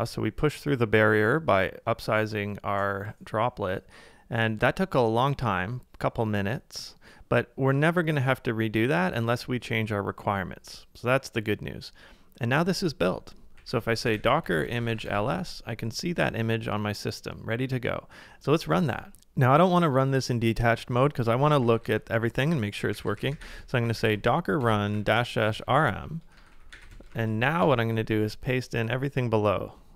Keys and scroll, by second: 13.3-14.7 typing, 17.4 typing, 19.2 BackSpace, 21.2-22.7 typing, 24.7-26.5 typing.